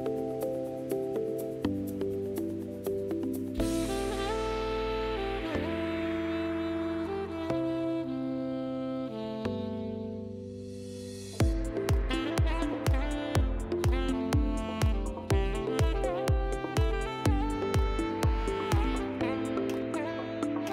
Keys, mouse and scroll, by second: 0.0-0.3 typing, 2.1 click, 2.5-3.3 typing, 3.1 right click, 6.3 click, 11.6 right click, 12.6 click, 13.8 click, 19.1 click, 20.5 click, 20.6 right click.